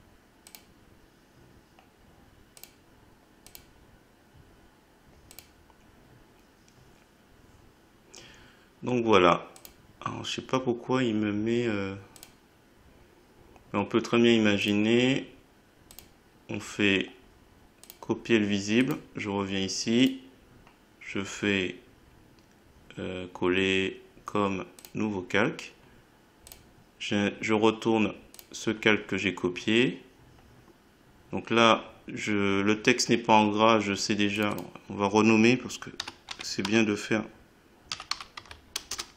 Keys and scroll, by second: 36.0 g, 36.3 a, 37.6-38.8 typing, 38.9 Return.